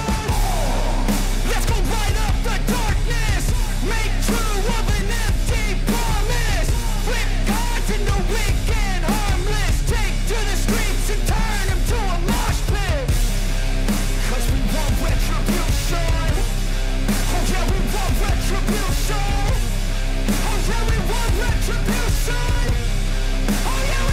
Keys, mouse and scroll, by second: 9.8 click, 10.3 right click, 11.0-19.8 drag, 19.8 ctrl+=, 22.0-24.1 drag.